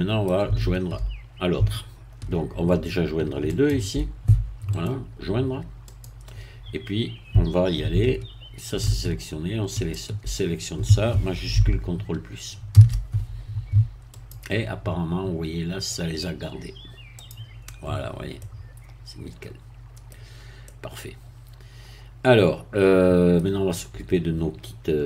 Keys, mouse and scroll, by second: 3.5 shift+click, 4.7 right click, 5.9 click, 9.8 shift+click, 12.7 ctrl+shift++, 14.1 click, 15.5-15.9 scroll down 1, 15.9 middle click, 17.2 click, 18.0-18.3 scroll up 1, 18.4-20.2 middle drag, 20.2 scroll down 1, 20.7-23.5 middle drag.